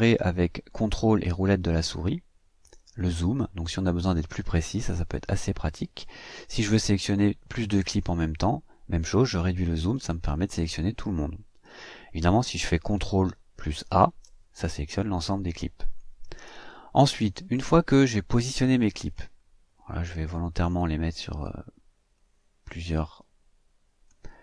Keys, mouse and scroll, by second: 1.6-1.9 ctrl+scroll down 2, 2.2 ctrl+scroll down 2, 3.0-4.8 ctrl+scroll up 4, 4.8-5.1 ctrl+scroll down 2, 5.1-5.6 ctrl+scroll up 2, 5.6 scroll down 2, 9.3 scroll down 2, 13.8 ctrl+a, 15.8 click, 18.2 click, 19.9-21.6 drag, 22.1-24.2 drag.